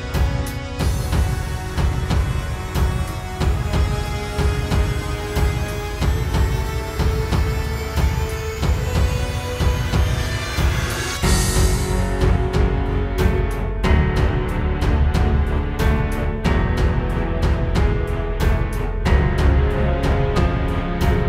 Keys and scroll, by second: 0.2 space, 2.0 space, 2.5 alt+super+space, 3.5 space, 3.9 space, 4.4 super+z, 5.5 space, 8.8 super+z, 11.9 space, 19.6 space, 19.9 space.